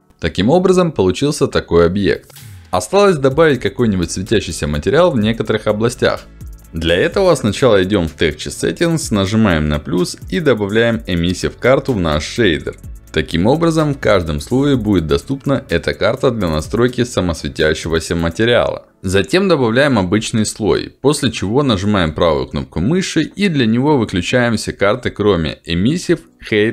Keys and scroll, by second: 9.4 ctrl+alt+d, 21.6 ctrl+z.